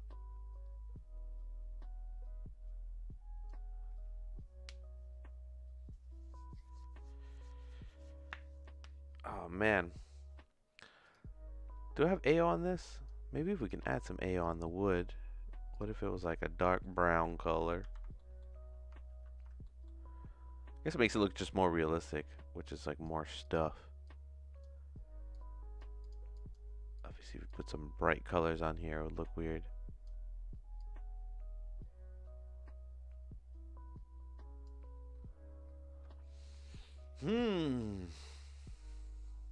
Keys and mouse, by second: 12.3 click, 13.5 click, 14.6 middle click, 15.7 click, 16.6 middle click, 16.8 click, 17.4 ctrl+c, 17.8 ctrl+c, 18.2 middle click, 19.1 ctrl+v, 19.6 middle click, 21.0-23.0 drag, 25.3 click, 26.0 click, 30.7-34.6 drag.